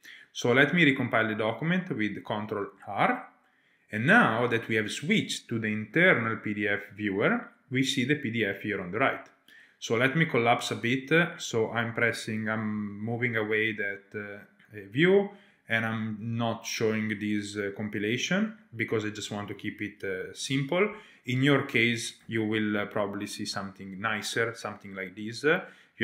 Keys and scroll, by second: 2.1 ctrl+r, 10.2 super+1, 10.9 super+1, 22.2 shift+super+a, 23.5 Return.